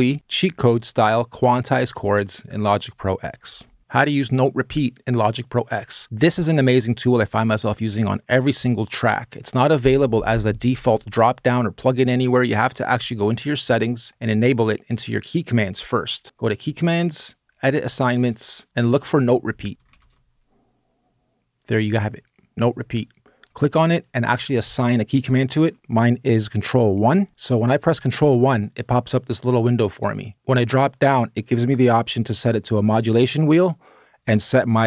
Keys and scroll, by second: 19.5-20.2 typing, 21.6 typing, 28.1 ctrl+1.